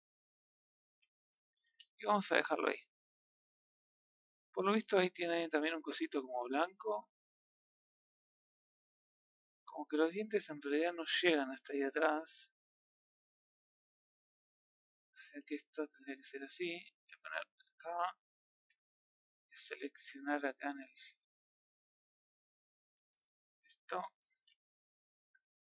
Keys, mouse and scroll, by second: 1.2 scroll down 2, 1.4 middle click, 1.6 a, 1.8-2.3 scroll up 1, 2.8-4.7 middle drag, 4.7-5.4 scroll up 3, 5.4-6.6 scroll down 3, 6.6-13.3 middle drag, 13.3 scroll down 1, 13.5-14.6 scroll up 2, 14.6-16.1 middle drag, 16.1 Tab, 17.5 click, 18.6 Tab, 18.9 middle click, 19.7 scroll up 2, 20.8-21.8 shift+middle drag, 21.8 click, 24.4 KP_1.